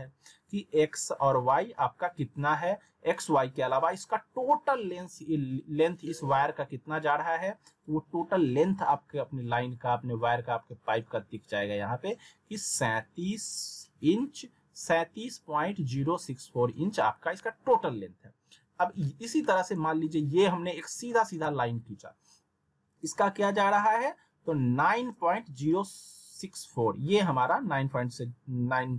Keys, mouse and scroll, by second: 19.5 click, 21.4 z, 22.7 scroll down 1, 23.2 middle click.